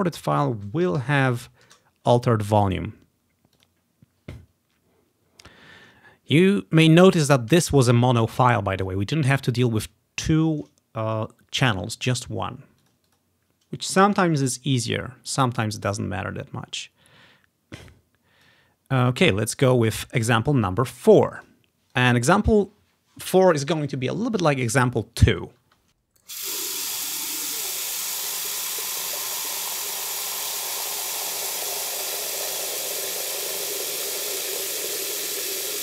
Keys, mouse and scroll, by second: 1.0 typing, 1.8 Return, 3.7-5.4 drag, 3.9 typing, 12.9 click, 13.2 click, 15.4 click, 15.6-16.6 drag, 18.0 click, 19.3 click, 21.5 click, 21.7 click, 21.7 space, 22.0-23.9 drag, 25.7 Tab.